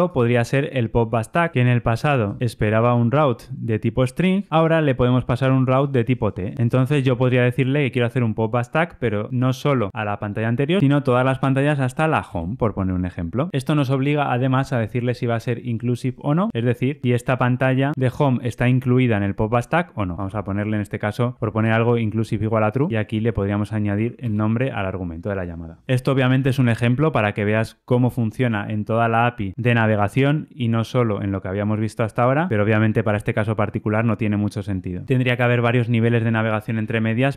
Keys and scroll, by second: 2.5 super+p, 12.3 Return, 13.5 Escape, 21.6 Return, 22.9 alt+Return.